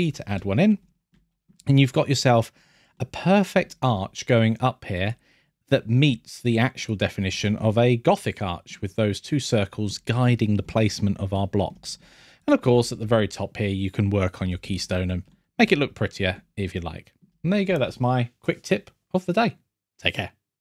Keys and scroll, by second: 0.7 scroll, 7.3 scroll, 10.6 scroll, 11.9 scroll, 14.7 scroll, 15.9 scroll, 17.3-18.1 scroll.